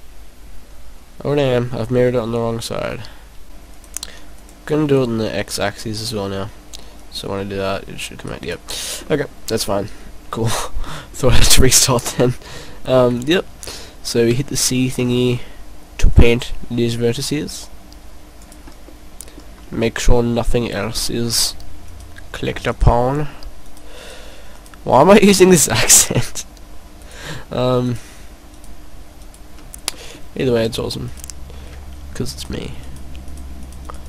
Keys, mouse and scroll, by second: 3.4 click, 3.7 click, 4.8 click, 4.8 middle click, 7.0 right click, 9.0 middle click, 11.1 middle click, 11.7 middle click, 13.1 right click, 13.8 right click, 14.2 c, 18.6 right click, 18.9 middle click, 19.7 middle click, 20.7-21.5 scroll up 5, 21.9 right click, 22.8 shift+right click, 23.7 shift+right click, 24.0 shift+right click, 24.5 shift+right click, 25.5 shift+right click, 26.3 shift+right click, 27.0 shift+right click, 27.9 shift+right click, 28.6 shift+right click, 29.2 shift+right click, 29.8 scroll down 1, 30.0 middle click, 31.0 shift+right click, 31.9 shift+right click, 32.4 shift+right click, 32.8 shift+right click, 33.6 shift+right click, 33.8 shift+right click.